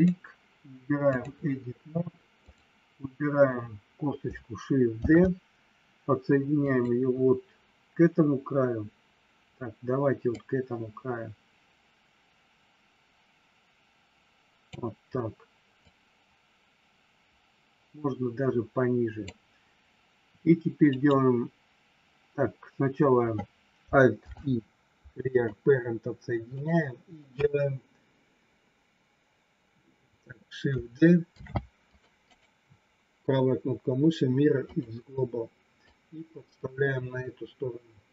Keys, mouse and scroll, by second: 2.4 click, 5.0 shift+d, 6.5 click, 10.3-14.7 drag, 15.8-19.1 drag, 21.0-22.4 right drag, 24.1 alt+p, 26.5-29.8 right drag, 31.4 shift+d, 32.1-34.9 right drag, 35.8-38.1 drag.